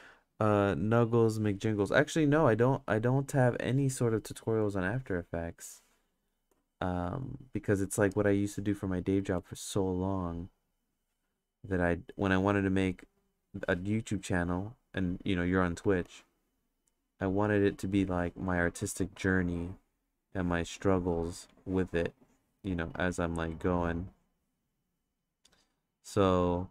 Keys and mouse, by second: 1.9 click, 3.6 click, 4.9 click, 7.0 right click, 7.9 ctrl+z, 8.4 click, 9.2 ctrl+z, 9.6 click, 10.8 click, 11.9-13.3 drag, 14.4 click, 15.8 ctrl+z, 16.3 click, 18.0 click, 19.3-21.0 drag, 21.4 click, 22.1 click, 23.1-24.2 drag, 24.8 click, 25.3 click, 25.8 click, 26.0 click, 26.5 click.